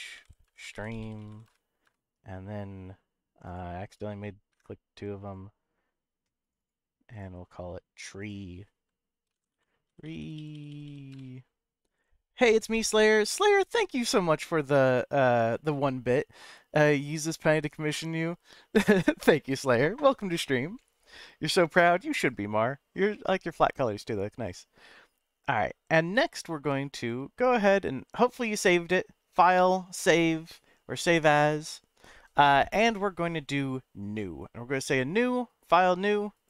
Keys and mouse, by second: 24.9 middle click, 26.9 click.